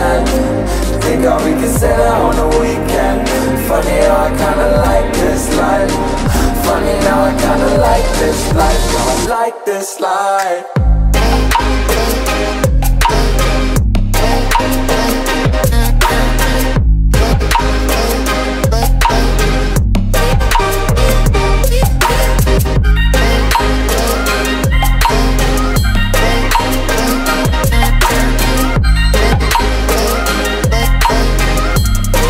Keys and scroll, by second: 3.3 ctrl+[, 16.5 ctrl+j, 16.9 ctrl+t, 20.0 Return, 20.5 ctrl+[, 26.6 Down, 28.1 ctrl+j, 28.7 ctrl+t, 31.2 Return.